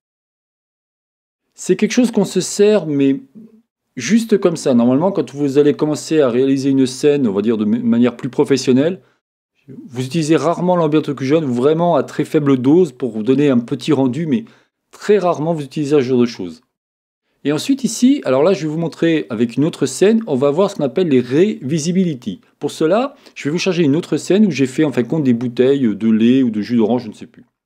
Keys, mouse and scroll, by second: 4.9 middle click.